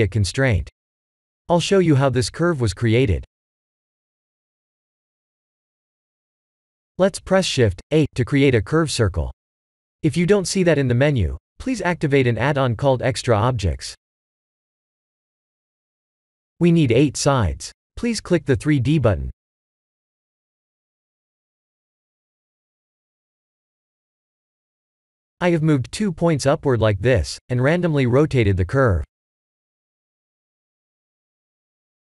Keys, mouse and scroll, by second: 6.3 click, 8.0 shift+a, 17.0 click, 21.2 click, 22.1 click, 23.0 shift+click, 24.1 g, 26.8 Tab, 27.4 middle click, 29.8 KP_0, 31.3 KP_0.